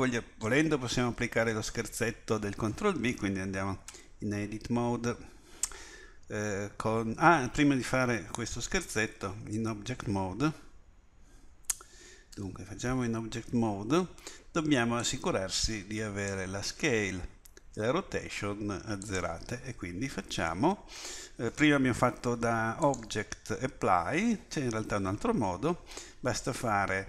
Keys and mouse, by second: 3.9 Tab, 12.4 Tab.